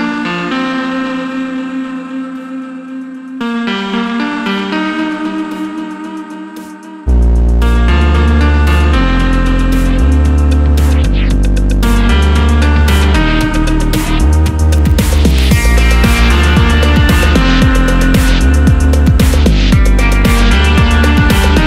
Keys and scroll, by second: 8.9 BackSpace.